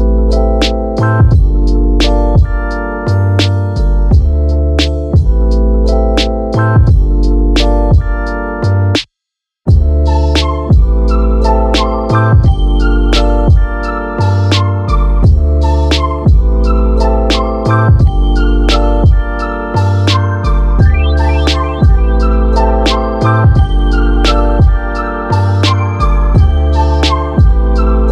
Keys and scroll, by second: 18.3-19.1 typing, 20.1 space, 21.6 super+z.